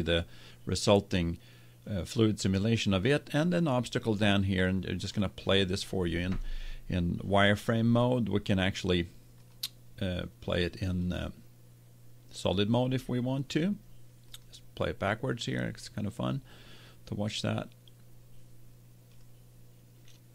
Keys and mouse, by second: 4.9-7.6 drag, 9.4-12.8 drag, 14.2-16.1 drag, 19.1-20.3 drag.